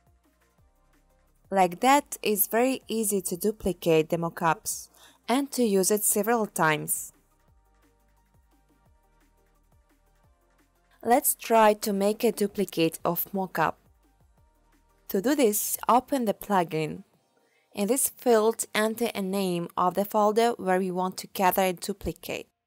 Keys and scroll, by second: 15.1-17.5 typing.